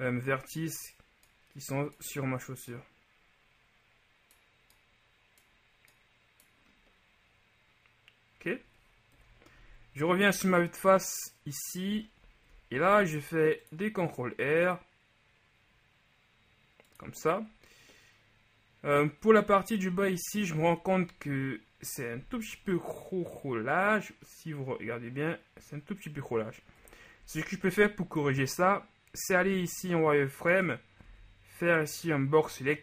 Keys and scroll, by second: 12.9 ctrl+shift+r, 27.0 KP_3, 29.5 z, 31.1 b.